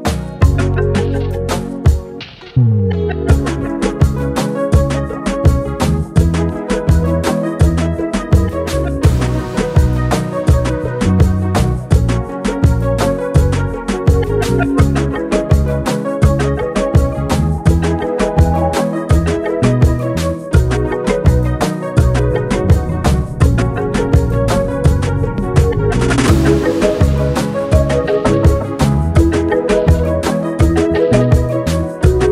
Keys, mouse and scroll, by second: 3.1-4.1 shift+drag, 16.3 click, 17.5 shift+click, 19.5 ctrl+shift+], 20.9 click, 23.6-25.1 drag, 27.1-28.7 drag, 29.9-31.2 shift+drag.